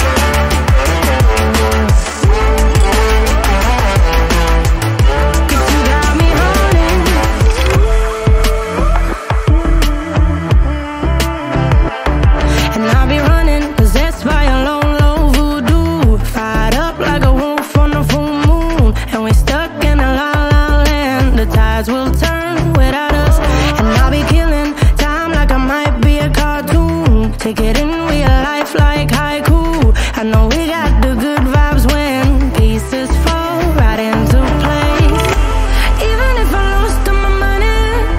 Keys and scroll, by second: 7.6 ctrl+alt+z, 8.3 ctrl+alt+z, 15.1 ctrl+alt+z, 18.8 ctrl+alt+z, 31.2 ctrl+alt+z.